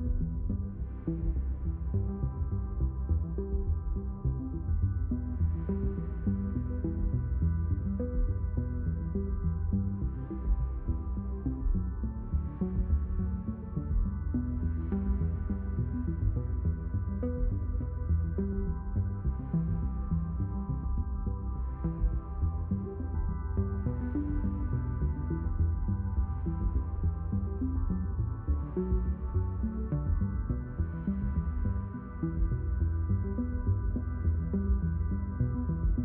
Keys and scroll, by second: 26.5 g, 27.2 y.